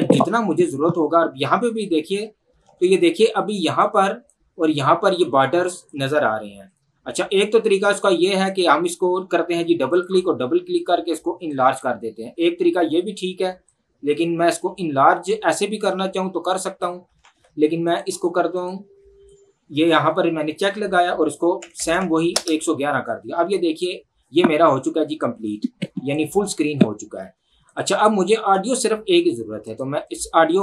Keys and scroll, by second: 6.5 Escape, 17.3 ctrl+z, 21.6 KP_1, 22.5 Return.